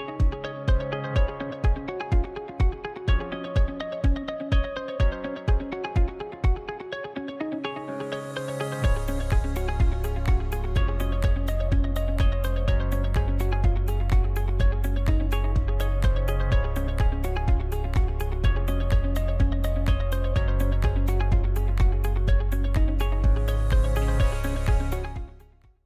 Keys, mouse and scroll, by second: 0.1 scroll down 1, 0.3-1.4 middle drag, 1.4 scroll up 2, 2.0 alt+shift+right click, 2.6 alt+shift+right click, 3.4 ctrl+e, 5.4-6.6 middle drag, 6.6-6.9 scroll up 2, 6.9-7.8 shift+middle drag, 7.8 KP_Decimal, 8.4 middle click, 9.1 scroll up 4, 9.5-10.7 middle drag, 10.7 right click, 12.0-14.1 middle drag, 14.1 shift+right click, 14.8-16.7 middle drag, 16.7 shift+right click, 17.7-19.6 middle drag, 19.6-20.9 scroll up 1, 20.9 shift+right click, 21.5-21.8 scroll down 2, 21.8-23.4 middle drag, 23.4 ctrl+e, 24.7-25.8 middle drag.